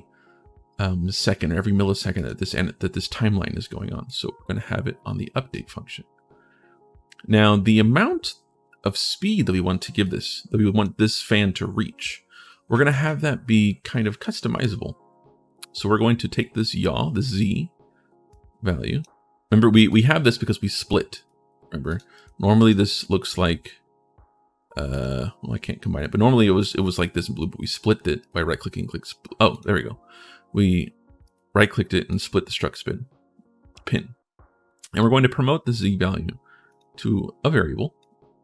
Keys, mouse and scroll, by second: 1.9 click, 3.8-5.3 drag, 9.8 click, 18.1 click, 19.6 click, 20.9 right click, 21.6 right click, 21.9 right click, 22.4 right click, 24.7 click, 28.0 right click, 29.3 click, 29.3 right click, 31.0 right click, 31.9 click, 34.8 click, 36.5 click, 37.8 click.